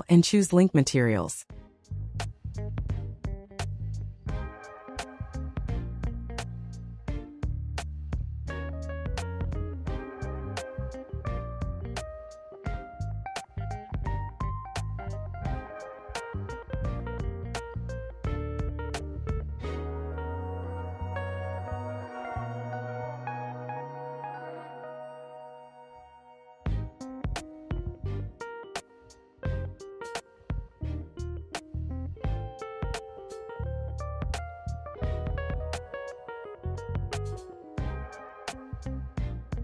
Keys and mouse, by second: 0.4 click, 1.3 click, 2.7 click, 6.8-9.5 drag, 10.3-12.2 drag, 14.5 click, 17.9 shift+click, 19.5 shift+click, 20.1 shift+click, 21.3 shift+click, 22.4 shift+click, 24.1 shift+click, 24.6 middle click, 26.5 shift+click, 29.1 shift+click, 32.4-32.7 middle drag, 34.9 shift+click, 36.1 ctrl+l, 38.3 click.